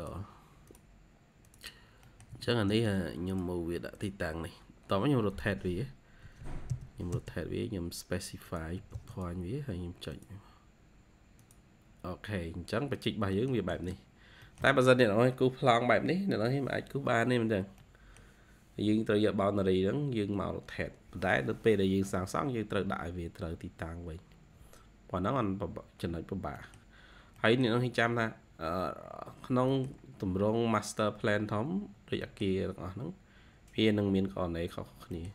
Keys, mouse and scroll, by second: 1.9 middle click, 2.2-2.9 typing, 2.7 scroll up 1, 4.4 scroll down 1, 4.7 typing, 6.1-6.6 typing, 7.4-7.7 scroll up 1, 7.7-8.7 typing, 11.7-12.1 scroll down 2, 12.3 typing, 13.2 middle click, 13.5 typing, 14.0-14.4 scroll down 1, 14.4 middle click, 14.9-16.0 scroll up 2, 16.0 scroll up 3, 17.3-17.7 scroll down 1, 17.7 middle click, 17.9-18.9 scroll down 1, 22.3-23.3 scroll up 1, 23.8-25.0 scroll up 3, 25.6-26.5 scroll down 2, 26.5 middle click, 27.0 scroll down 1, 27.3 middle click, 29.2 scroll down 2, 32.2 middle click, 34.6-35.0 scroll up 2, 35.0 middle click.